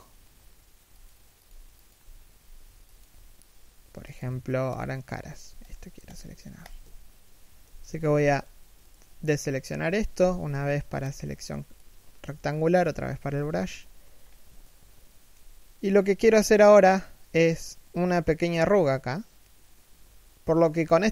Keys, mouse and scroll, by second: 5.3 alt+right click, 7.5 b, 9.8 b, 13.1 alt+shift+middle click, 13.4 scroll up 1, 14.1 alt+shift+middle click, 15.4-15.9 scroll up 1.